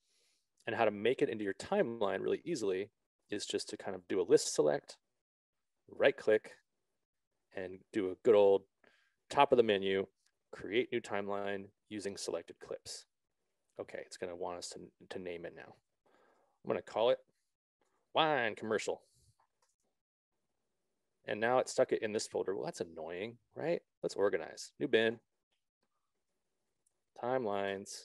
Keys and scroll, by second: 16.6-19.2 typing, 20.0 Return, 27.0-27.6 typing.